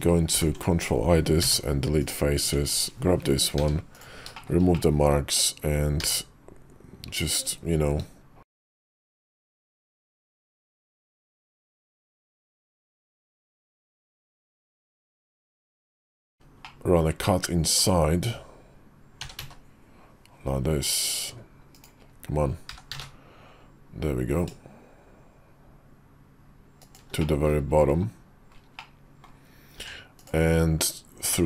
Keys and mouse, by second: 0.2 ctrl+i, 1.3 x, 2.3 Tab, 2.6 click, 3.5 q, 4.3 shift+click, 4.7 middle click, 5.9 e, 14.0 middle click, 15.0 shift+middle click, 15.4 middle click, 16.6-17.7 middle drag, 19.1 s, 22.6 g, 27.1 middle click, 28.7 middle click, 29.7 Tab, 30.1 click, 31.2 g.